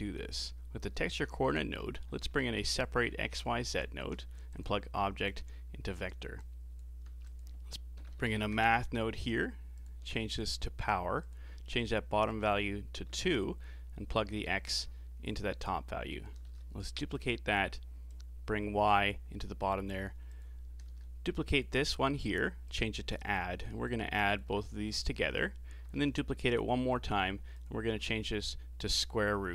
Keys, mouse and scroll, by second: 0.6-1.1 scroll up 1, 1.1 shift+a, 3.4 Down, 5.3 click, 6.4 click, 7.1 shift+a, 10.3-11.9 drag, 12.3-14.6 drag, 15.6 click, 16.5 shift+d, 18.1 click, 19.4 middle click, 20.3 click, 20.8 shift+d, 22.0-23.7 drag, 23.7-24.7 alt+right drag, 24.7-25.9 middle drag, 25.9 shift+d, 27.5-29.5 drag.